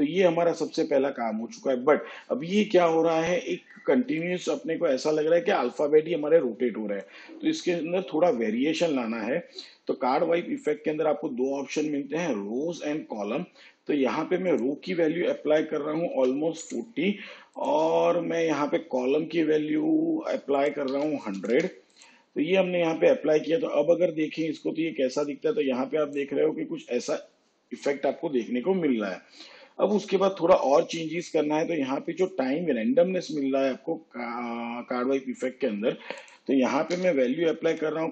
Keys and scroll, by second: 16.2 4, 16.7 0, 20.9 1, 21.4 0, 37.0 ., 37.9 6.